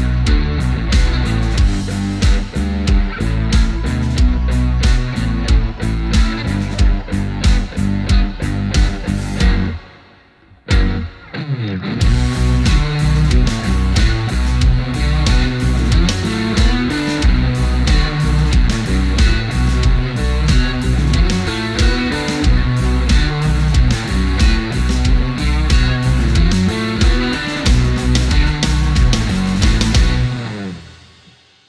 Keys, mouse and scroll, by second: 0.4-0.8 alt+scroll down 1, 3.1-3.6 scroll up 1, 4.0 click, 8.3-13.6 drag, 20.1 alt+scroll down 1, 24.8 click.